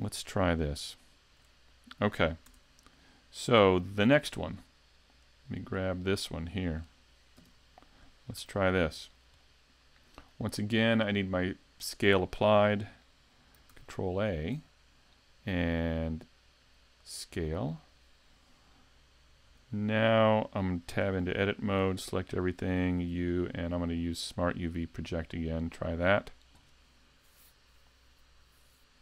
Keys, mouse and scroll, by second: 1.5-2.5 scroll, 2.5 ctrl+shift+Tab, 3.0 middle click, 5.6 click, 6.9 right click, 8.4 a, 9.4 middle click, 13.7 right click, 19.5 n, 20.3-20.9 scroll, 20.9 Tab, 22.0 a, 23.1 u.